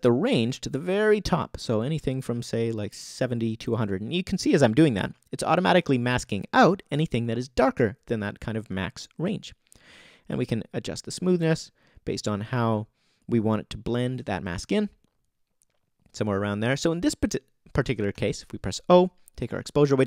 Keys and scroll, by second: 18.1 o.